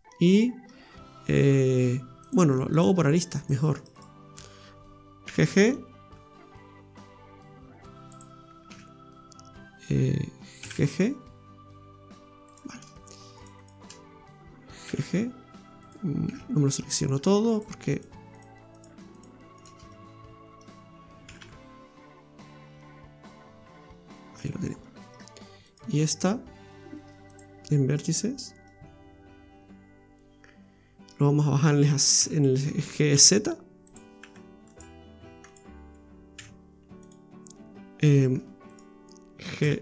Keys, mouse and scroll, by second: 0.1 middle click, 2.2 click, 2.7 click, 3.4 right click, 3.8 alt+shift+right click, 3.9 right click, 5.2 g, 8.7 ctrl+z, 10.6 g, 12.9 right click, 13.4 alt+shift+right click, 13.8 right click, 14.9 g, 16.3 ctrl+z, 16.6 middle click, 17.5 shift+right click, 17.9 shift+right click, 18.3 shift+right click, 18.7 shift+right click, 19.1 shift+right click, 19.5 shift+right click, 19.9 middle click, 21.2 g, 24.8 middle click, 25.6 right click, 27.3 click, 28.7 middle click, 32.2 z, 34.6 g, 35.5 right click, 36.3 z, 38.7 right click, 39.6 g.